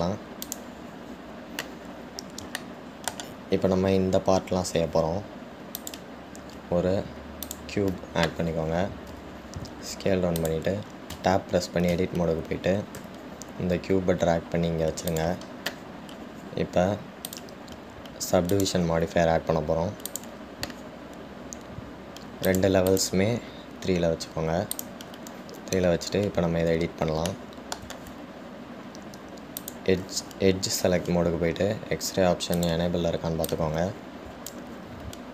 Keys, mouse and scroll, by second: 1.7 click, 3.8-6.9 shift+middle drag, 6.9-10.0 drag, 18.5 click, 21.4-22.7 drag, 23.7-27.2 drag, 27.2-28.5 scroll up 2, 28.5-30.8 shift+middle drag, 30.8 click, 33.8-34.8 drag.